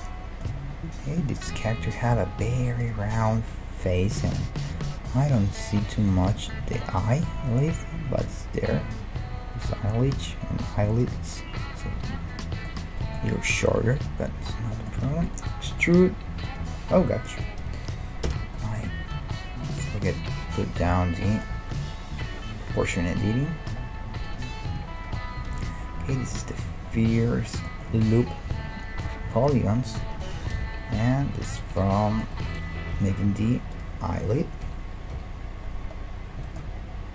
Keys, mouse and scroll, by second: 4.4 scroll up 1, 4.6 scroll down 1, 4.7 scroll up 1, 15.1 e, 15.7 s, 18.3 o, 21.2 middle click, 21.8-23.6 drag, 23.6 middle click, 24.3 right click, 25.5 KP_1, 28.5 r, 29.2 middle click, 30.3 g, 32.1-33.6 middle drag, 32.9 KP_1, 34.6 KP_1, 35.1 KP_5.